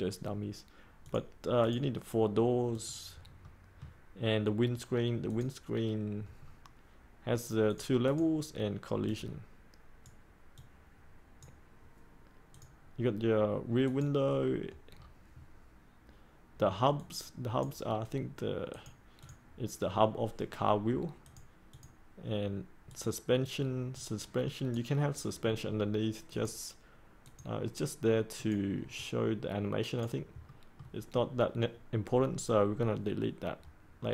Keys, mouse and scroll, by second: 1.0 click, 3.4 middle click, 5.2 click, 6.3-7.6 scroll up 1, 7.6-14.8 drag, 14.8-16.9 scroll up 1, 16.9-30.2 drag, 30.4 middle click.